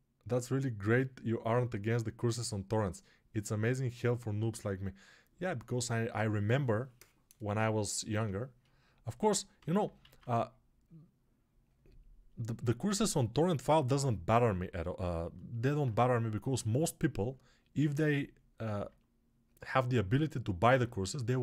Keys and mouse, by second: 8.5-21.4 alt+drag, 9.5 g, 10.0 alt+q.